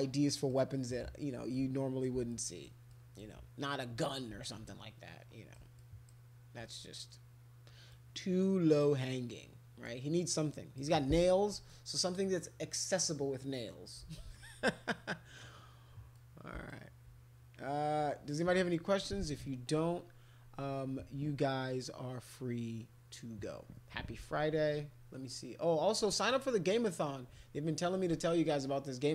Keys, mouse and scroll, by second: 0.1 alt+click, 1.5 alt+click, 2.3 alt+click, 2.9 alt+click, 4.4-5.5 alt+drag, 5.8 click, 7.9-9.8 drag, 10.4 click, 16.1 click, 26.2 click.